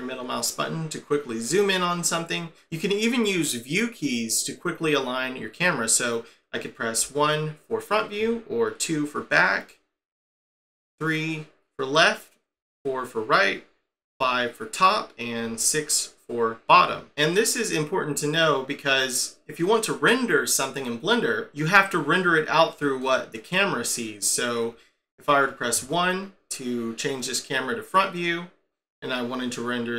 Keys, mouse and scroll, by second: 7.0 1, 8.2 2, 10.0 3, 12.5 4, 14.0 5, 15.4 6, 23.0 middle click, 25.7 1, 28.1-29.9 scroll down 1.